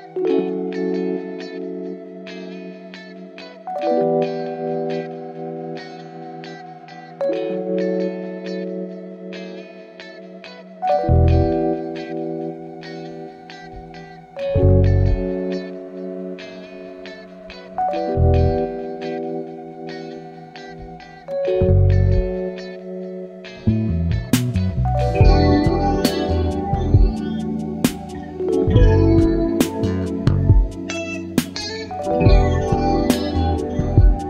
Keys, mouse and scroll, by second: 0.5 click, 1.6 KP_6, 1.9 KP_Enter, 6.1 click, 6.9 click, 7.8 click, 10.4 ctrl+d, 11.4 ctrl+d, 12.5 click, 13.2-15.2 ctrl+drag, 16.2-17.8 ctrl+shift+drag, 18.1-19.3 ctrl+shift+drag, 20.3-21.2 ctrl+shift+drag, 21.3-23.4 ctrl+shift+drag, 23.8 shift+click, 24.8 ctrl+KP_Subtract, 26.8 click, 28.2 shift+click, 30.3 click, 31.4 click, 32.7 Down, 33.8 Down.